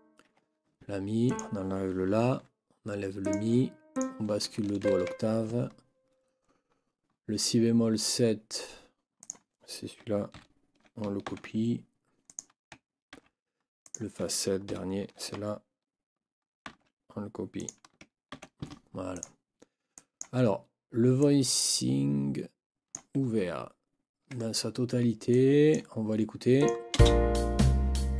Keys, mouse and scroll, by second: 0.3 Escape, 1.3 click, 2.3 Delete, 3.2 click, 3.5 Delete, 3.9 click, 4.8 ctrl+Up, 9.2 click, 10.3 shift+Down, 11.3 ctrl+shift+c, 12.3 click, 13.1 ctrl+v, 13.8 click, 14.7 shift+Down, 16.7 ctrl+c, 17.5 click, 18.3 ctrl+v, 19.1 click, 19.9 click, 21.2-23.1 drag, 23.9 ctrl+scroll down 2, 25.3 click, 26.6 click, 26.9 space.